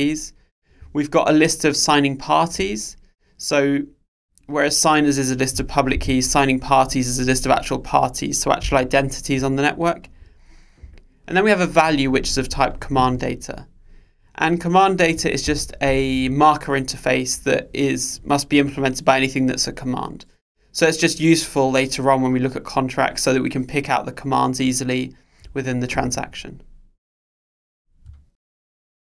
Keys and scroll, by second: 15.7 super+b.